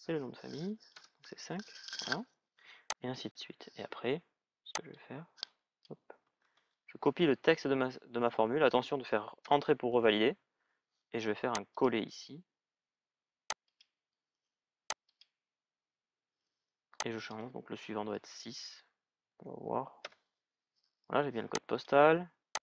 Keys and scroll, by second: 0.8 Return, 6.2 ctrl+c, 9.1 ctrl+c, 9.2 Return, 17.8 BackSpace, 19.1 shift+-, 19.8 Return.